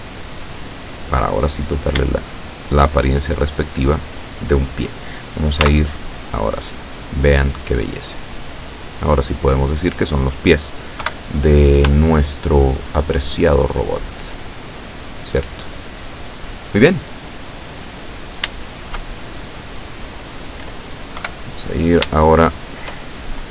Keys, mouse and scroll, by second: 2.2 shift+middle click, 3.4 scroll down 1, 4.0 middle click, 5.6 z, 6.2-6.6 scroll down 1, 6.8-10.5 middle drag, 11.0 KP_7, 12.1-13.3 shift+drag, 13.7-18.3 shift+drag, 18.3 scroll down 2, 18.7 shift+click, 19.3-20.9 shift+drag, 21.3 KP_7, 22.2 shift+click.